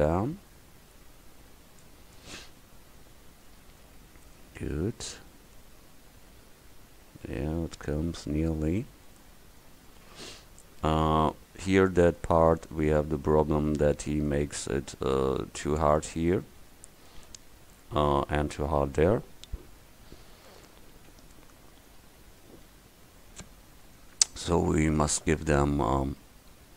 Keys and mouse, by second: 4.0 Tab, 4.8 middle click, 8.0 middle click, 9.8 Tab, 14.6 Tab, 22.5 Tab.